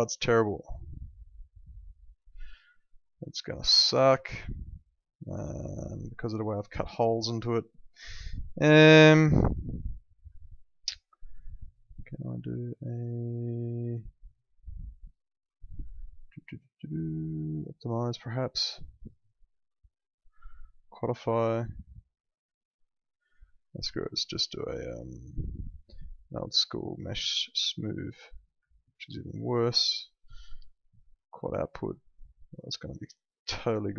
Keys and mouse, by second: 3.3 alt+middle click, 4.1 ctrl+z, 4.5 alt+middle click, 10.4 alt+middle click, 11.4 click, 23.9 click, 27.7 click, 28.7 alt+middle click, 29.6 click, 31.9 alt+middle click.